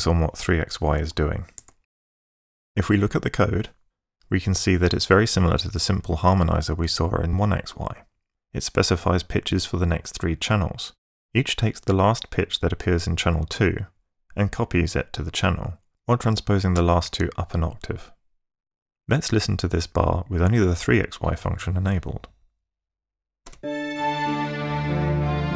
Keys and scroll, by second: 22.9 ↺, 23.5 space.